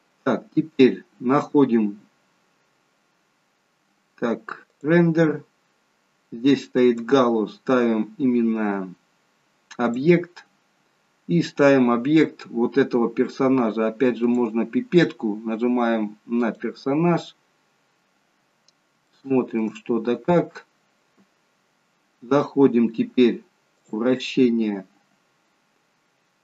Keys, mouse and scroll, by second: 0.6-1.0 scroll down 5, 4.6 click, 5.4-6.8 scroll down 2, 6.8 click, 10.6-11.9 scroll down 1, 11.9-14.2 scroll down 4, 14.2 click, 14.2-15.4 scroll down 1, 17.4-17.8 scroll up 5, 19.1 shift+middle click, 19.9 scroll up 1, 21.6-23.7 scroll up 5, 23.7 click.